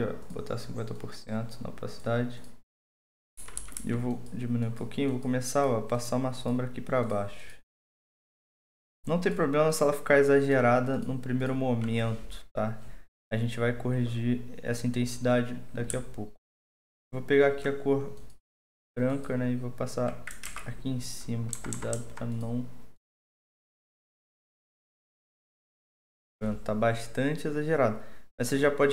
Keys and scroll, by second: 0.0-0.4 typing, 3.4-3.8 typing, 20.4 ctrl+z, 21.5-22.1 typing.